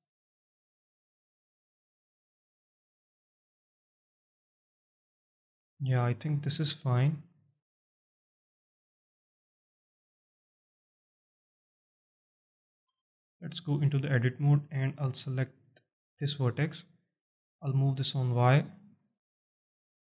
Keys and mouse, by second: 0.2-1.0 alt+drag, 1.2 alt+shift+drag, 1.9-5.3 alt+drag, 5.8-7.2 alt+drag, 7.8-8.2 alt+drag, 8.6-12.6 alt+drag, 12.9 Tab, 13.4 alt+click, 14.9 alt+click, 16.1 click, 17.2-18.7 drag, 19.0 alt+middle click.